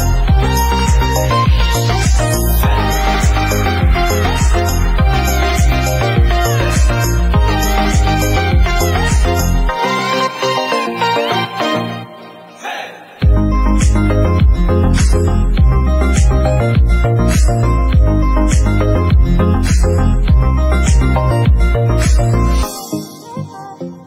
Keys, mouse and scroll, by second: 0.3-0.9 shift+middle drag, 0.9 ctrl+s, 2.2 Tab, 2.4 Tab, 2.5 click, 2.7 Tab, 3.0 Tab, 3.2 click, 3.3 Tab, 3.5 shift+middle click, 4.0 click, 4.1 Tab, 4.2 click, 4.4 Tab, 4.6-5.8 middle drag, 5.8 scroll down 1, 5.9 middle click, 6.4 Tab, 6.7 Tab, 6.8-8.1 middle drag, 9.1 alt+click, 9.2 middle click, 9.7 ctrl+e, 10.6 alt+a, 10.7-12.0 middle drag.